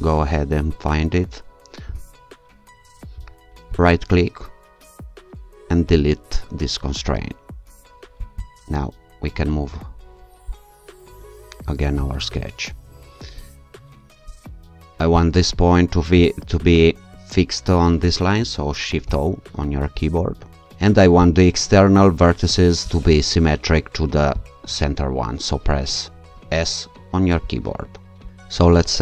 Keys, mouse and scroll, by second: 0.0 click, 3.8 right click, 5.9 click, 8.2-10.5 drag, 10.5-11.5 scroll down 1, 11.5-11.9 scroll down 1, 13.5-14.3 scroll up 1, 15.2 click, 16.2 click, 19.0 shift+o, 20.1-20.6 scroll down 2, 21.2 click, 22.9 click, 24.3 click, 26.5 s.